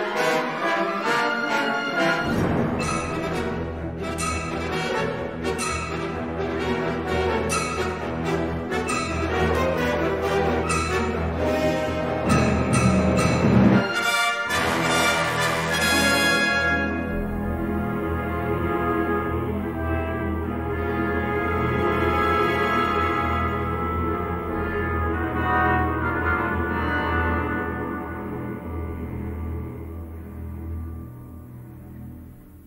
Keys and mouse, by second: 1.6 2, 1.8 click, 2.0 g, 4.1 1, 4.3 click, 4.5 g, 7.3-8.6 middle drag, 9.0 1, 9.4 click, 10.0 g, 11.8 shift+middle click, 12.2 middle click, 13.0 shift+middle click, 14.7 middle click, 15.7 3, 18.2 middle click, 19.0 middle click, 19.9 shift+middle click, 20.7 g, 21.8 middle click, 22.8 middle click, 24.2 a, 25.1-26.1 middle drag, 26.6 3, 27.2-28.6 shift+drag, 28.9 middle click, 30.1 s, 31.1 middle click, 31.9 g.